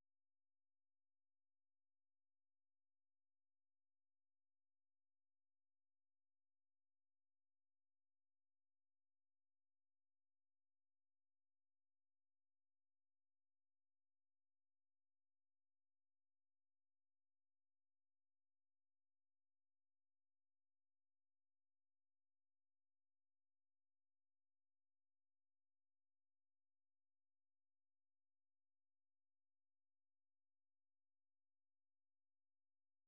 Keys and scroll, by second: 6.8-11.9 typing, 13.8-14.8 typing, 16.4 typing, 17.6-23.2 typing, 24.3-30.3 typing.